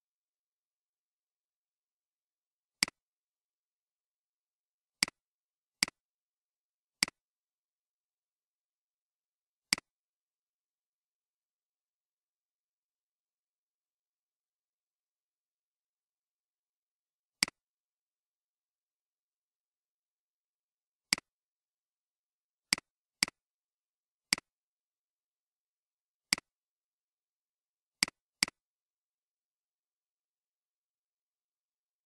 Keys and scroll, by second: 14.5 Escape, 29.5-30.7 typing.